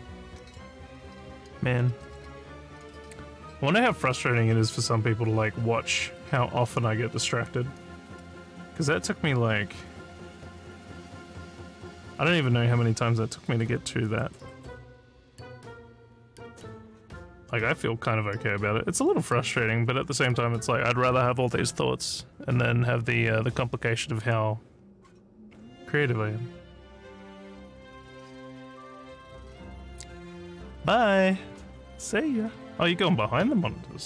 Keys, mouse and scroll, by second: 2.0 click.